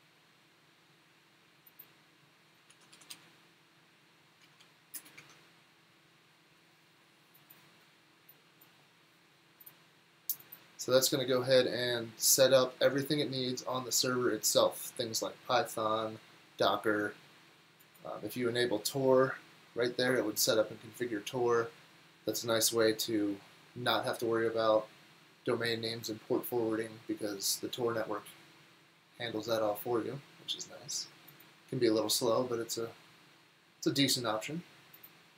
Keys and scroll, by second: 2.7 super+t, 2.8-3.6 typing, 4.4 Down, 4.6 Down, 5.0 Return.